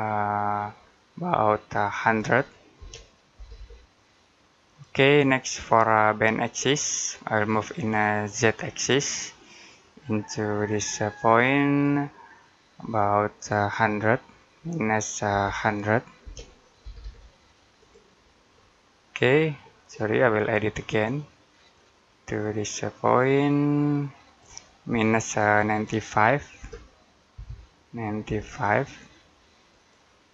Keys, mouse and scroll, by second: 2.6-3.9 typing, 4.5 click, 5.7 middle click, 8.1 click, 16.1-16.9 typing, 17.6 click, 18.4 middle click, 19.7-20.2 scroll down 1, 21.6 click, 27.2 9, 29.6 click, 30.2 scroll down 1.